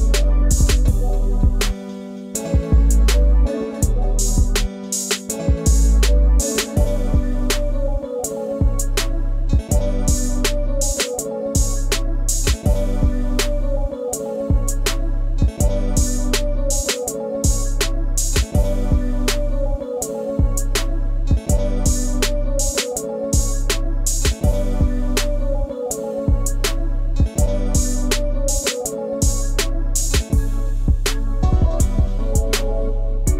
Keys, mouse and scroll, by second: 0.5 middle click, 1.2 click, 5.3 click, 6.0 click, 6.4 click, 8.4-10.8 middle drag, 11.7-18.2 drag, 19.1 Tab, 19.5 click, 19.8-21.1 middle drag, 21.4 click, 22.3-23.0 middle drag, 23.0 Tab, 24.0-27.8 drag, 27.8-29.0 middle drag, 29.0 g, 32.7-33.3 middle drag.